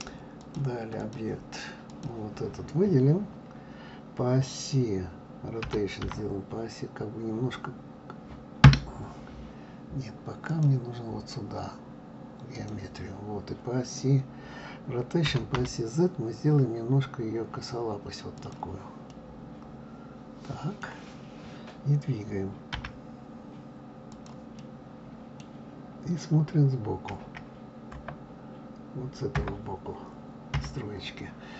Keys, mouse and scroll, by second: 0.4-2.0 drag, 5.7 r, 10.5-13.5 drag, 15.3 r, 19.0 scroll up 1, 19.1-22.1 middle drag, 22.7 g, 24.6-27.1 middle drag, 27.1 KP_1, 27.9 KP_Enter, 29.3 KP_Enter, 30.5 KP_3.